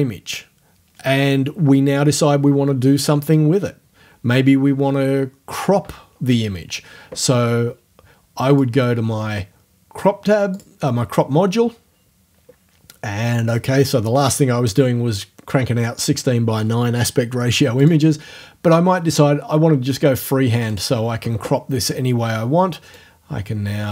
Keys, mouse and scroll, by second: 8.5 click, 10.6 click, 17.8 click, 20.7 click, 22.9-23.9 drag.